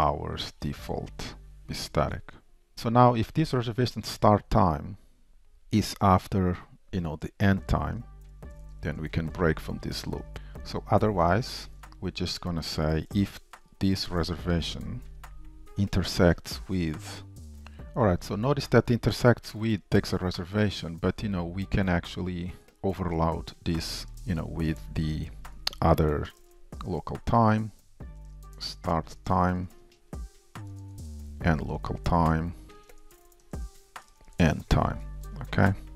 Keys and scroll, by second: 2.0 super+s, 16.8 Return, 17.5 ctrl+Tab, 19.3 super+b, 22.0 ctrl+w, 22.0 alt+Up, 23.0 super+d, 24.1 shift+Return, 24.4 ctrl+shift+Right, 32.9 Return.